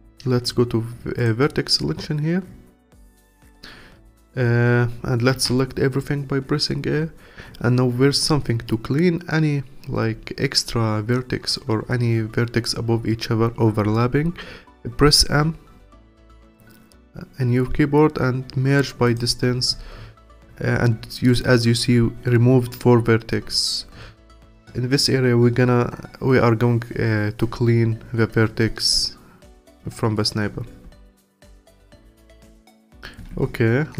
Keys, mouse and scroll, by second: 1.2-4.3 drag, 5.3 a, 15.3 m, 30.6 m, 33.2 Tab.